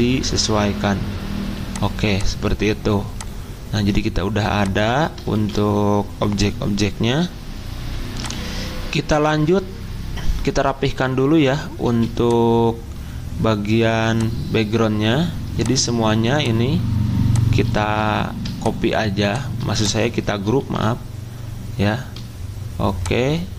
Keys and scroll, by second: 5.3 ctrl+z, 11.8 z, 17.8 ctrl+z, 20.6 ctrl+z.